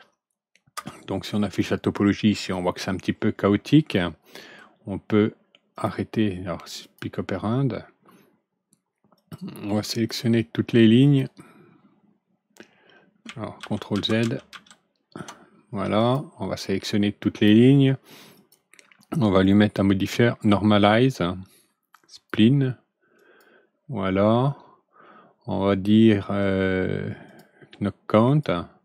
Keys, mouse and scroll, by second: 0.7 F4, 1.5-2.1 middle drag, 3.9-4.5 alt+middle drag, 5.7 click, 6.7 click, 9.1 click, 9.8 shift+click, 10.9 shift+click, 13.9 ctrl+z, 15.9 click, 16.7-17.4 drag, 18.3 click, 19.3-22.2 drag, 23.1 click, 27.2 click, 28.2 click.